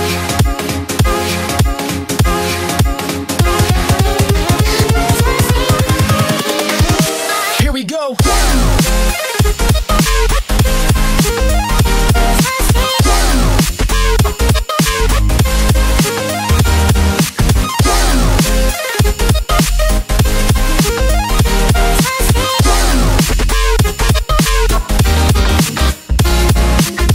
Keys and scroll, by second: 9.2 ctrl+t.